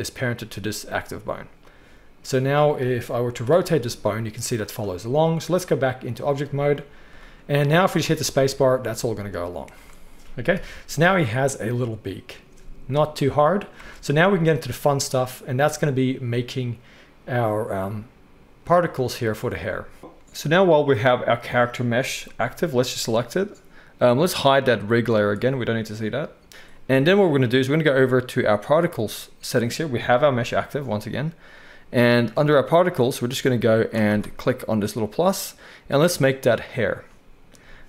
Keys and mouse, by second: 3.4 r, 5.4-21.4 drag, 8.0 space, 8.5 z, 9.7 alt+a, 10.5 KP_1, 13.7 space, 21.4-24.6 middle drag, 22.4 g, 24.6-26.5 drag, 26.5-28.5 middle drag, 28.5 click, 28.6-34.0 middle drag, 30.1 g, 34.0-36.8 drag, 36.8-37.8 middle drag.